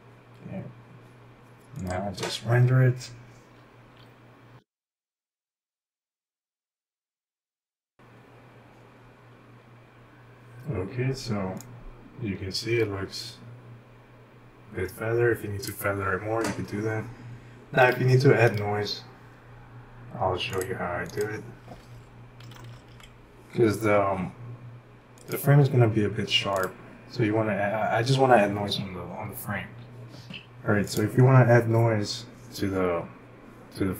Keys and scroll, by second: 22.2-23.4 typing.